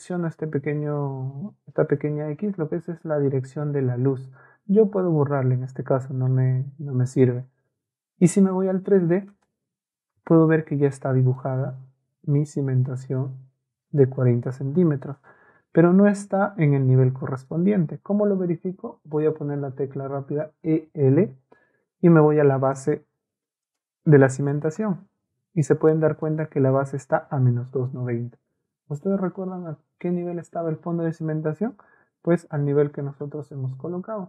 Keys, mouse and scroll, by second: 5.3 Delete, 7.6 middle click, 9.3 middle click, 10.7 middle click, 12.4 Caps_Lock, 20.5 e, 21.0 l, 22.8 click, 23.6 click, 24.5 click.